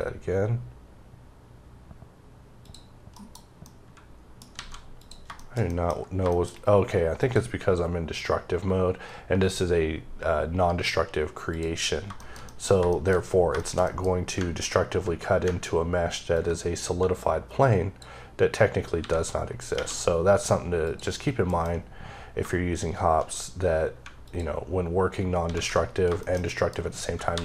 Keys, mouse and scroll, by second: 0.9-1.9 scroll down 1, 2.5 click, 3.0 KP_Decimal, 3.6 middle click, 4.3 scroll up 2, 4.4 alt+a, 4.9 click, 5.3 shift+middle click, 5.8 scroll up 3, 6.2 middle click, 7.1 click, 11.4 click, 11.8 scroll down 3, 12.1 shift+middle click, 12.6 scroll up 1, 12.8 shift+middle click, 13.1 scroll up 2, 13.5 shift+middle click, 14.0-14.3 scroll up 2, 16.3 ctrl+click, 18.9 x, 20.7 click, 21.4 alt+m, 22.3 shift+m, 24.2 alt+click, 25.3 alt+a, 25.7-26.1 alt+scroll down 3, 26.1 shift+middle click, 26.4 middle click, 27.2 KP_7.